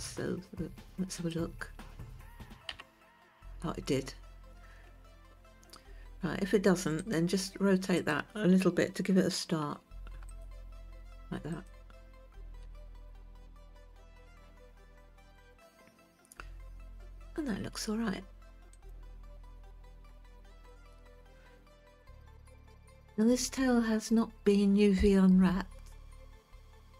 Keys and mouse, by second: 1.6 click, 3.3 g, 7.5-7.8 right drag, 8.5 click, 10.1 r, 13.2 g, 21.2-21.6 shift+middle drag.